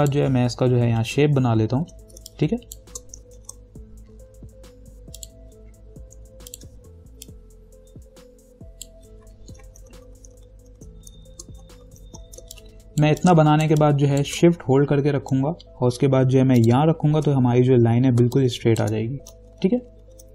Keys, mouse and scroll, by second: 1.5 ctrl+=, 2.4 space, 2.8 click, 2.9 space, 3.6 ctrl+=, 5.4 click, 7.8-9.3 ctrl+drag, 10.0 ctrl+-, 11.4 space, 12.0 ctrl+-, 12.6 space, 12.7 click, 13.1 space, 14.0 click, 14.0 space, 16.8 shift+click, 18.4 space, 18.6 click, 18.9 space, 19.7 ctrl+=.